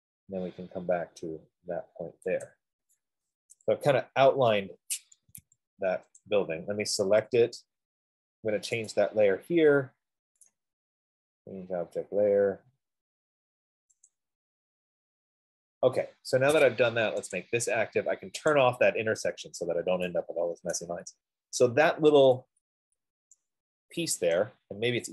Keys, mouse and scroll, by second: 0.5-1.0 scroll down 3, 1.0 scroll, 2.4-2.8 scroll up 5, 2.8 click, 3.6 Return, 4.9 scroll down 3, 5.7 Escape, 5.9 Escape, 6.6 click, 6.6 middle click, 9.5 right click, 10.9 right click, 13.6 F15, 14.6 click, 17.7 click, 18.8 click, 20.2 scroll, 21.2 right click, 21.5 middle click, 21.7 middle click, 24.6 right click.